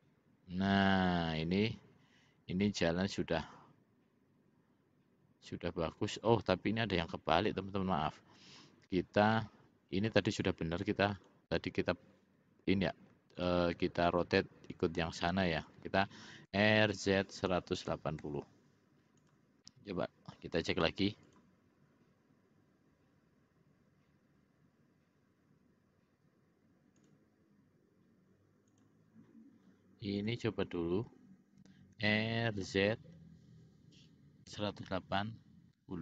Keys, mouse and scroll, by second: 7.1 click, 8.6 click, 9.5 middle click, 11.3 click, 16.6 r, 19.8 middle click, 21.5 click, 27.2 click, 28.8 click, 30.3 click, 32.1 r.